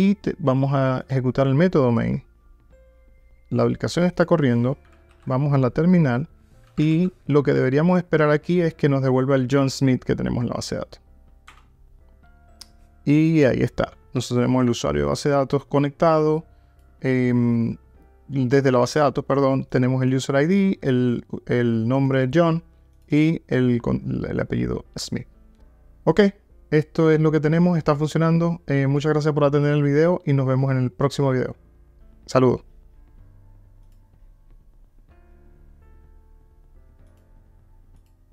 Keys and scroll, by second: 1.1 ctrl+r, 5.1 alt+F12.